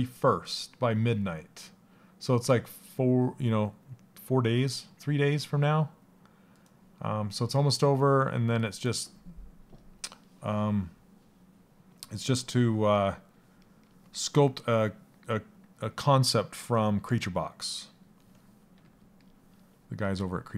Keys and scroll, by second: 18.3 a.